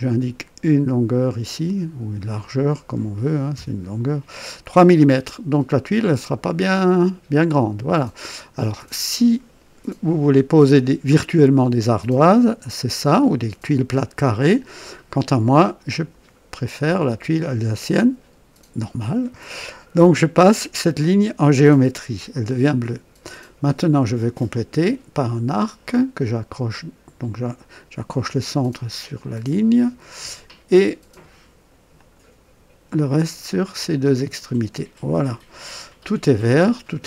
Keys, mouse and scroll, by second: 1.4 click, 3.5 KP_3, 5.9 click, 6.7-7.7 scroll up 2, 8.0 right click, 15.8 click, 20.8 click, 25.5 click, 27.9 click, 31.9 click, 34.0 click.